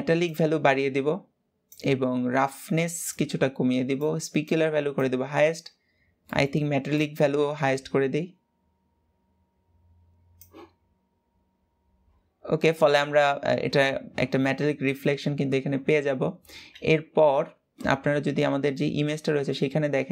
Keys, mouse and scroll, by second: 0.0-2.1 drag, 2.1 scroll up 3, 2.8-5.3 drag, 5.3 scroll up 2, 5.9 middle click, 6.6-9.7 drag, 19.9 Tab.